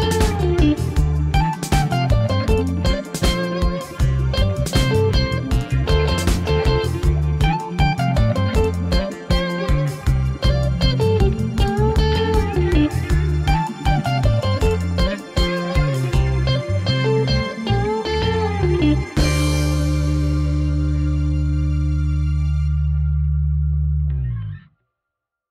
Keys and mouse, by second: 0.9 ctrl+l, 1.2-1.7 middle drag, 2.1 shift+middle drag, 3.4 shift+d, 4.2 g, 4.2 z, 7.0 shift+click, 7.7-8.1 shift+middle drag, 8.5 shift+d, 9.2 g, 10.0 z, 12.0 shift+click, 12.5 middle click, 13.7 shift+middle click, 14.1 middle click, 15.1 click, 15.7 shift+middle click, 16.2 middle click, 16.6 g, 16.9 x, 18.5 shift+click, 18.7 middle click, 19.8 shift+middle click, 20.4 middle click, 21.3 g, 21.5 x, 22.8 shift+click, 24.5-25.5 middle drag.